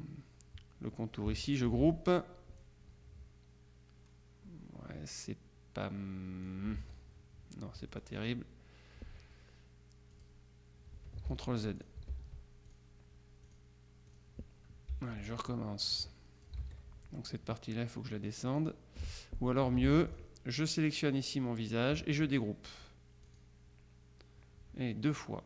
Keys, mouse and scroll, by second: 1.7 ctrl+g, 2.7-7.0 drag, 6.9 ctrl+z, 8.0 click, 10.2 click, 11.4 ctrl+z, 11.9 ctrl+click, 12.2 ctrl+z, 12.8 ctrl+click, 13.5-14.1 drag, 14.2 click, 15.5-17.0 shift+drag, 16.7 ctrl+z, 18.6 click, 19.9 ctrl+z, 20.2 ctrl+click, 23.3 click.